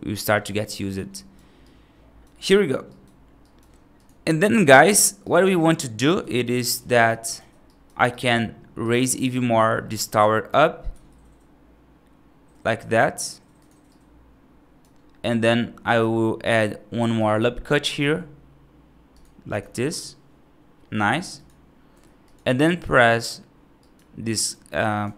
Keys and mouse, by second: 0.5 right click, 1.0 right click, 1.5 right click, 2.7 right click, 3.3 right click, 4.7 click, 5.1 right click, 6.3 shift+click, 6.9 shift+click, 7.5 right click, 8.0 right click, 8.7 right click, 9.7 middle click, 10.1 right click, 10.8 e, 13.8 right click, 15.8 ctrl+r, 17.8 ctrl+r, 21.3 click, 21.8 3, 22.2 click, 22.5 right click, 23.7 right click, 24.2 right click.